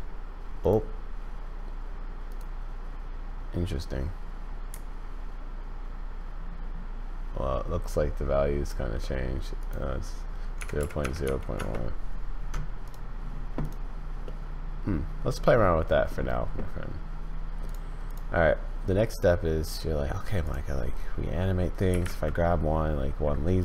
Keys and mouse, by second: 0.7-2.3 drag, 4.8-8.7 shift+drag, 9.7-12.4 drag, 14.2-16.1 middle drag, 17.6 click, 20.4 click, 21.9 g.